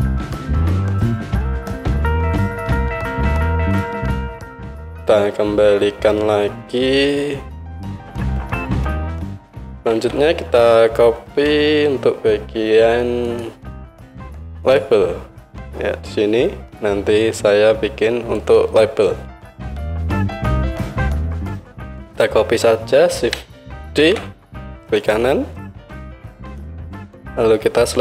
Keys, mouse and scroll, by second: 1.9 Tab, 2.0 click, 2.0-3.7 middle drag, 2.0 right click, 2.4 Tab, 3.7-7.9 right drag, 7.9-9.4 middle drag, 9.4 right click, 10.0 Tab, 11.5 KP_1, 13.3-14.8 middle drag, 16.6-25.1 right drag, 24.0 shift+d, 25.1-28.0 middle drag.